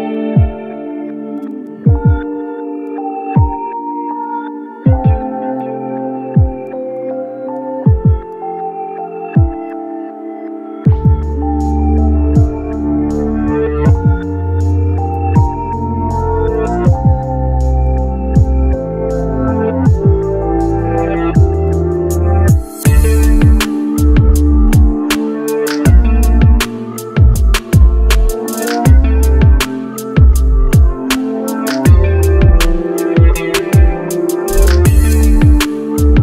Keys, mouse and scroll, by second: 9.1 double click, 10.9 ctrl+z, 11.7 shift+Page_Down, 16.5 ctrl+z, 17.9 shift+Page_Down, 23.0 double click.